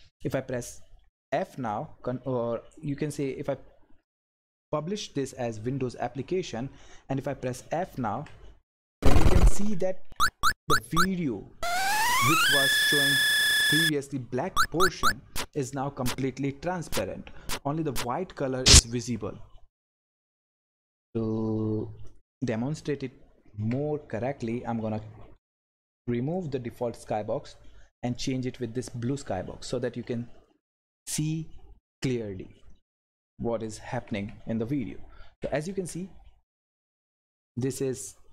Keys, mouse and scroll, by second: 1.1-3.1 drag, 8.1 f, 9.0 Right, 9.7 Up, 22.1 click, 24.8 scroll down 1, 26.3 click, 27.2 scroll up 1, 28.1 click, 30.6 ctrl+F10, 33.9 Right, 34.8 Left, 35.3 Up.